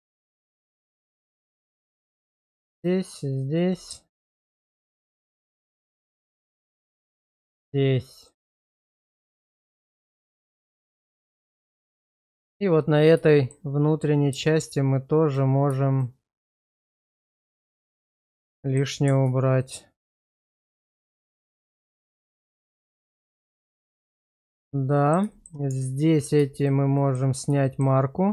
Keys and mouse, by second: 0.7 alt+click, 1.5 alt+shift+click, 2.8 alt+shift+click, 3.3 alt+shift+click, 4.3 ctrl+x, 4.8 middle click, 5.3 middle click, 7.6 alt+shift+click, 8.9 alt+shift+click, 9.9 ctrl+x, 10.3 shift+middle click, 10.8 middle click, 11.4 shift+middle click, 11.9 middle click, 12.3 shift+middle click, 13.3 shift+middle click, 15.9 alt+shift+click, 16.8 alt+shift+click, 17.5 middle click, 17.9 shift+middle click, 18.6 middle click, 21.0 alt+shift+click, 21.8 ctrl+x, 22.5 shift+middle click, 22.8-24.2 middle drag, 24.4 shift+middle click, 25.0 middle click, 25.3 shift+middle click, 25.7 Tab, 26.1 click, 26.6 shift+click, 27.1 middle click, 27.7 shift+middle click.